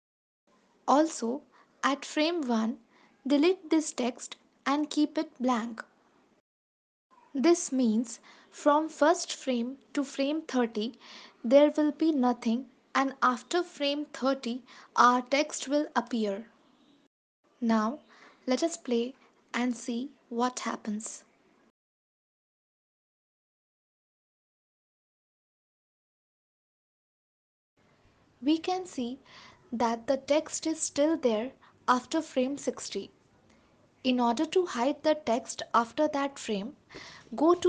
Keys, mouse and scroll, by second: 0.4 ctrl+s, 1.7 click, 6.6 ctrl+s, 8.9 click, 10.9 space, 12.9 space, 14.0 ctrl+z, 14.5 ctrl+s, 17.3 click, 18.6 ctrl+s, 19.7 space, 26.5 space, 27.3 ctrl+s, 32.6 ctrl+s.